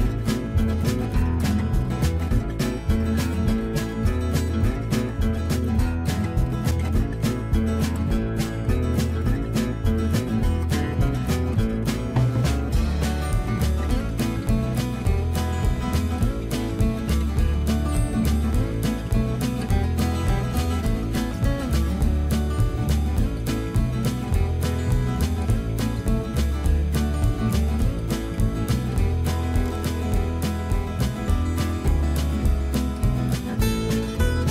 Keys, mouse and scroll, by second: 3.0 click, 5.4 middle click, 6.3 scroll up 1, 8.4 s, 10.4 s, 10.4 x, 18.7 click, 23.2 click, 28.7 click, 28.7 click, 31.9-32.8 scroll down 1, 32.8-34.5 middle drag.